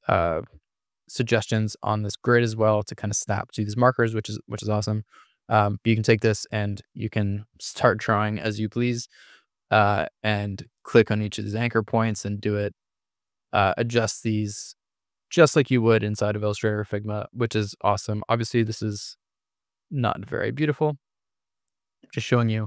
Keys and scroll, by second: 0.8 super+=, 9.5 Escape, 17.9 Escape, 19.1 Delete, 19.7 Escape, 20.6 BackSpace, 21.4 super+-.